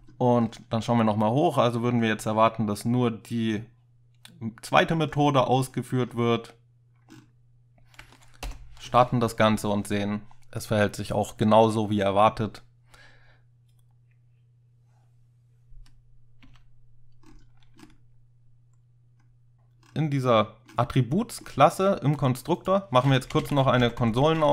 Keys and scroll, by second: 8.5 ctrl+F5, 16.5 space, 23.3 Return, 23.5 typing, 23.8 Tab, 24.0 Tab.